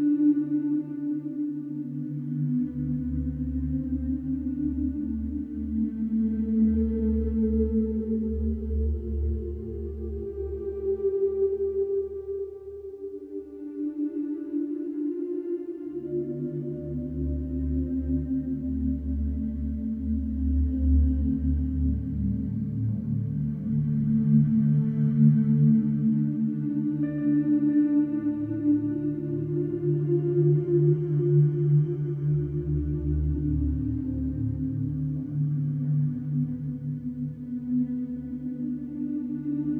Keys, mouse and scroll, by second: 0.2 r, 2.4-4.2 middle drag, 4.2-4.7 scroll up 2, 4.7 click, 5.5 click, 6.0 click, 6.7 ctrl+b, 8.8 middle click, 9.3 scroll up 2, 10.2 e, 13.3 Tab, 13.6 scroll down 2, 13.8-14.3 middle drag, 14.3-15.0 scroll down 10, 15.0-15.8 middle drag, 15.8 scroll down 2, 16.2-17.4 middle drag, 17.4 scroll down 1, 17.7-18.6 middle drag, 18.6 click, 19.6 click, 20.7 click, 21.3 shift+a, 22.9 alt+middle click, 23.4 s, 25.5 g, 26.9-27.5 middle drag, 27.5 scroll up 1, 28.0-28.6 shift+middle drag, 28.6 g, 30.5 scroll up 2, 31.0 s, 32.1 s, 33.5 g, 35.7-37.0 middle drag, 37.0 g, 39.3-39.7 middle drag.